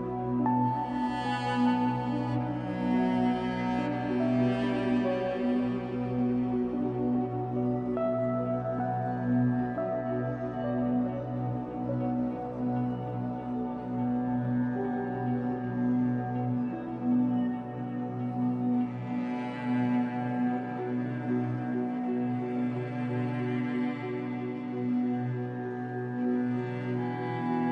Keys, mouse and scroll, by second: 0.7-3.1 drag, 1.3-2.1 scroll down 1, 5.8 click, 11.3 click, 11.3 scroll up 1, 11.5-12.7 shift+middle drag, 12.7-14.1 drag, 14.3 click, 15.0 scroll down 2, 15.1-16.8 middle drag, 16.5-16.8 scroll up 2, 16.8-19.7 drag, 19.7-20.7 middle drag, 20.1 scroll down 2, 20.7-21.8 drag, 21.8 middle click, 22.1-22.4 scroll up 2, 22.4-23.8 drag, 23.8 middle click, 24.6 click, 24.9 middle click, 25.2-25.5 scroll up 2, 25.5 click, 26.3 scroll down 2, 26.5 middle click, 27.2-27.7 drag.